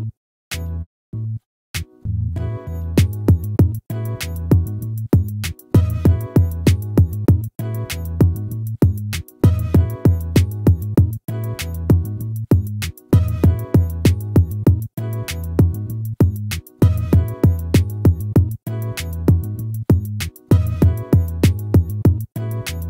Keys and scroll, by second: 11.6 ctrl++, 21.3 ctrl++.